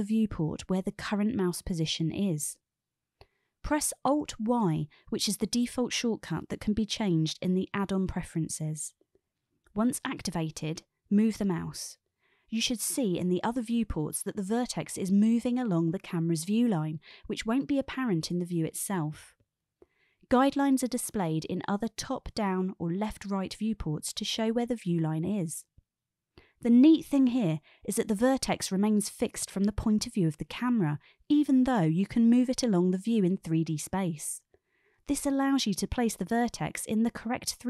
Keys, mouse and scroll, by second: 4.2 alt+y.